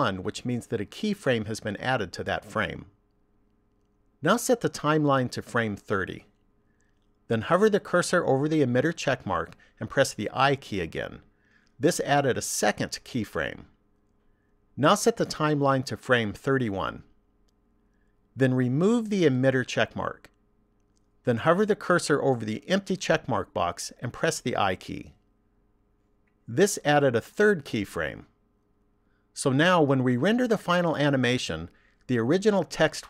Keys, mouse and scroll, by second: 4.8 click, 11.3 i, 16.2 click, 19.4 click, 24.9 i.